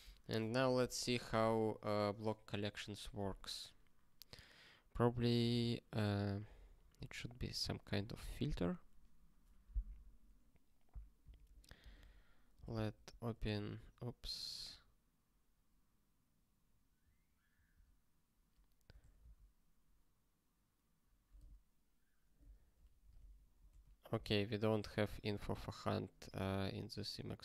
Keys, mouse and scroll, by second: 11.2 ctrl+s, 14.2 q, 25.3 super+b.